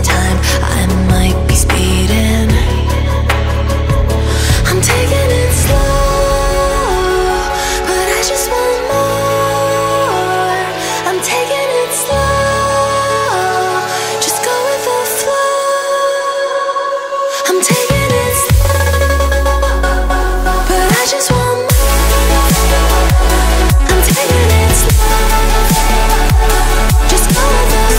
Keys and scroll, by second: 20.2 a.